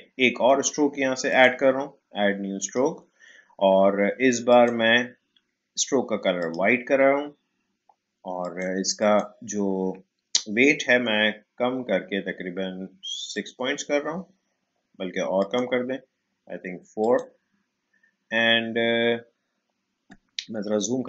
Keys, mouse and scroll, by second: 13.3 click.